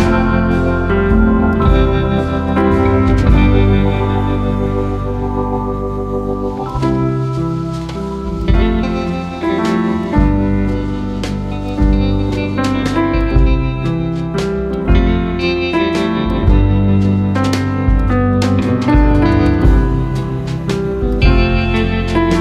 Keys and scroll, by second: 18.0 ctrl+a.